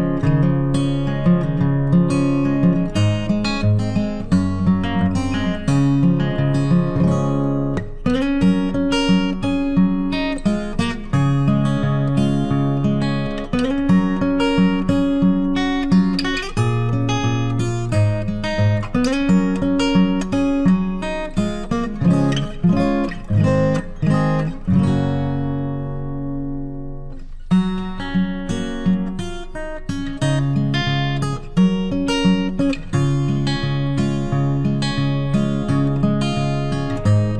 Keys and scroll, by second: 3.1 ctrl+t, 28.5 ctrl+t.